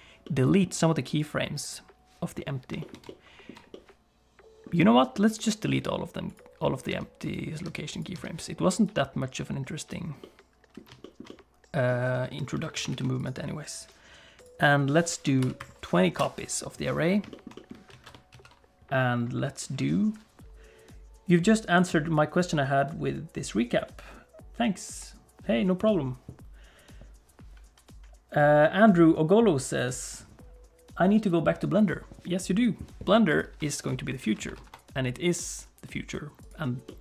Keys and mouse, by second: 0.2 click, 3.2 ctrl+click, 3.7-4.7 middle drag, 5.3 click, 6.3 click, 6.9 x, 7.2 click, 7.6 x, 7.9 click, 8.1 x, 8.8-9.9 drag, 10.2 middle click, 11.0 shift+middle click, 11.3 middle click, 12.6 alt+a, 12.9 ctrl+s, 13.2 click, 14.4-16.7 drag, 17.3 shift+middle click, 17.5 middle click, 17.9 alt+a, 18.3 ctrl+s, 33.3 click, 34.2 alt+a, 34.6 ctrl+s, 36.8 middle click.